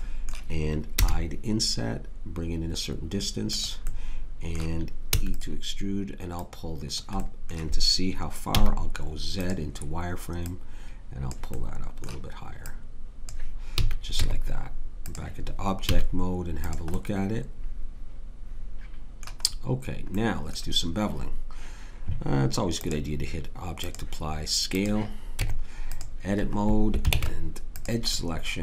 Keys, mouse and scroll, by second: 1.6 click, 5.1 e, 8.5 z, 13.7 a, 14.2 Tab, 15.8 z, 25.3 Tab, 27.1 ctrl+Tab.